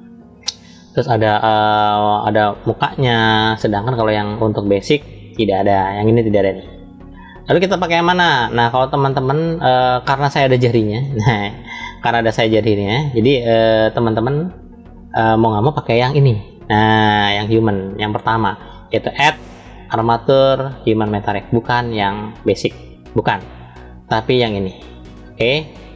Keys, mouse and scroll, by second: 7.5-8.4 middle drag, 9.6-10.2 middle drag, 11.6-13.8 middle drag, 16.1 drag, 16.7 click, 18.8-25.9 drag.